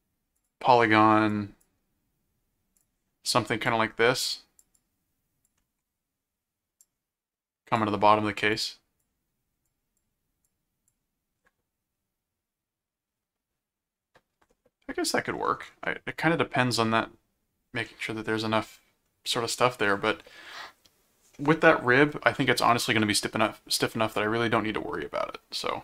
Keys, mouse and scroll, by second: 0.3 click, 1.3 click, 2.8 click, 3.6 click, 4.7 click, 6.8 click, 8.5 click, 9.6 click, 10.4 click, 17.9-19.0 middle drag.